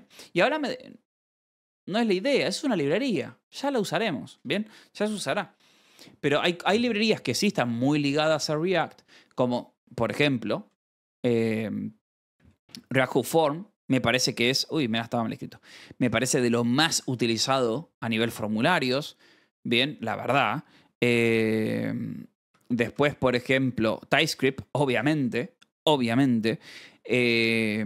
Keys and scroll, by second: 10.2-11.4 typing, 12.8 shift+v, 14.1-16.5 typing, 15.5 Escape, 16.0 ctrl+s, 20.4 j, 21.6 a, 21.6 BackSpace, 22.3 p, 22.4 Escape, 22.6 k, 22.8 ctrl+s, 24.0-24.9 typing, 24.9 Escape, 27.1 j.